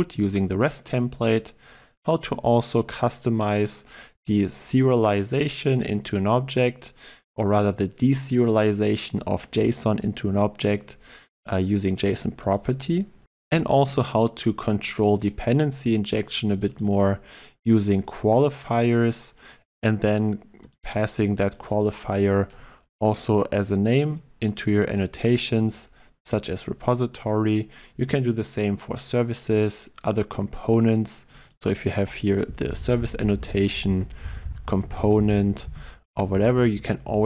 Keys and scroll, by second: 33.9 ctrl+BackSpace, 36.0 ctrl+z, 36.8 ctrl+z.